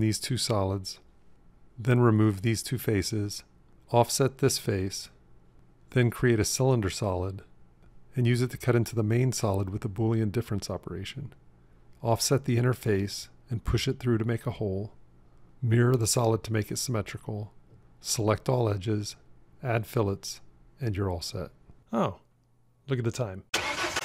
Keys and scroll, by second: 11.0 q, 12.5 o.